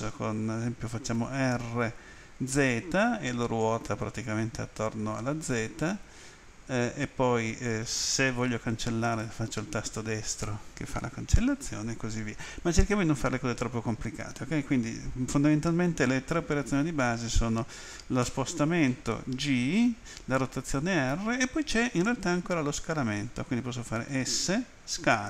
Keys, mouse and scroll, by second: 2.5 z, 9.0 right click.